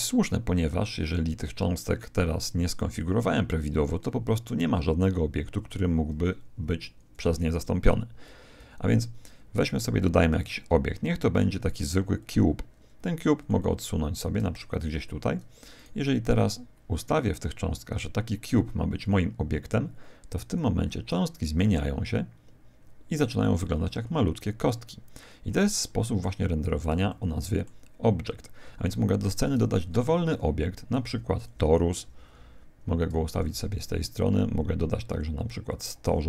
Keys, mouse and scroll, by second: 9.1 shift+a, 13.4 click, 15.7 right click, 19.0 click, 22.7-28.9 middle drag, 22.7 scroll up 1, 23.9 scroll up 1, 24.5-25.1 scroll up 1, 25.1-26.3 scroll down 1, 26.3 scroll up 1, 29.9 shift+a, 31.9 g, 33.8 shift+a, 36.0 g.